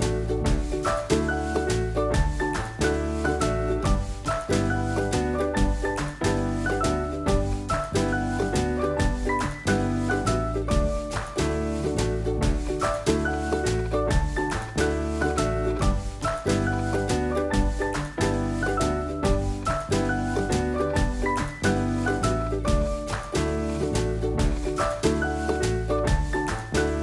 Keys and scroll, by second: 1.0 super+a, 2.1 super+c, 2.8 super+Tab, 4.9 super+v, 17.4 super+=.